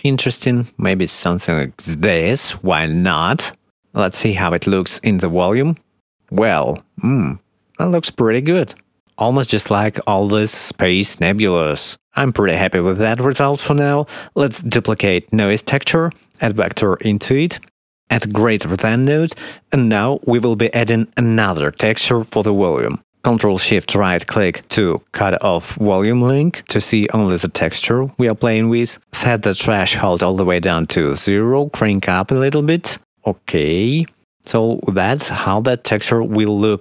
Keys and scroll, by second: 17.0 shift+d, 19.3 shift+d, 27.7 0, 27.8 Return.